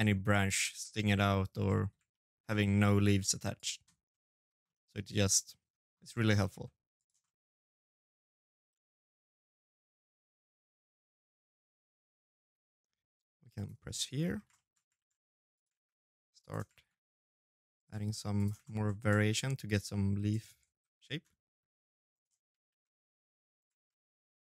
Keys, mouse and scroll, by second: 0.1 scroll down 3, 0.5 middle click, 0.8 shift+middle click, 1.3 middle click, 1.9 shift+d, 2.8 middle click, 3.4 middle click, 3.9 scroll up 3, 4.1 middle click, 4.7 middle click, 5.3 g, 6.0 middle click, 7.5 s, 7.8 g, 8.5 middle click, 8.8-10.9 typing, 9.0 middle click, 9.5 middle click, 10.0 middle click, 10.4 middle click, 10.7 middle click, 11.1 middle click, 11.5 middle click, 11.6 middle click, 11.8 shift+middle click, 11.8 shift+middle click, 11.9 middle click, 12.3 click, 12.9 scroll down 5, 13.3 shift+middle click, 13.7 shift+d, 15.3 shift+d, 15.5 shift+d, 17.4 shift+middle click, 17.4 shift+d, 17.9 shift+d, 19.9 ctrl+z, 20.9 right click, 21.4 shift+d, 22.9 shift+d, 24.2 middle click.